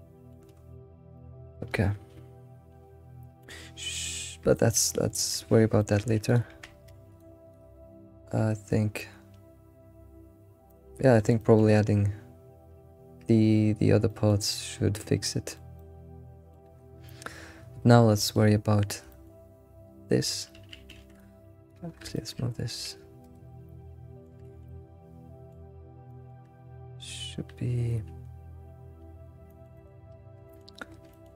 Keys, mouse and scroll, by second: 0.5-1.1 scroll up 5, 1.1-4.8 shift+middle drag, 4.8 scroll up 1, 5.1-6.4 shift+middle drag, 6.4 click, 6.8 Tab, 7.5 click, 7.9-9.7 scroll down 2, 9.7-10.7 scroll down 1, 10.7 shift+middle click, 11.7-14.1 scroll up 3, 14.1-16.7 shift+middle drag, 14.1 shift+scroll up 1, 17.6-18.2 scroll down 3, 18.2 shift+middle click, 19.3 scroll, 19.4-20.5 scroll down 8, 20.5 alt+x, 20.9-21.7 scroll down 1, 21.7 click, 22.1 shift+middle click, 22.1 scroll up 1, 22.8 g, 23.6 middle click, 24.6-25.9 middle drag, 26.1-28.6 shift+middle drag, 27.8 scroll down 3, 28.6-29.2 scroll down 6, 29.7 middle click, 30.5 alt+middle click, 31.1 alt+middle click.